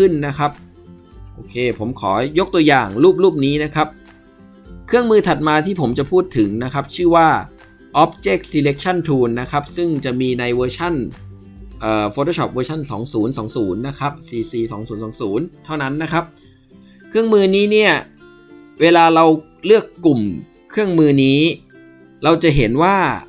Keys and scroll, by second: 22.9 ctrl+2.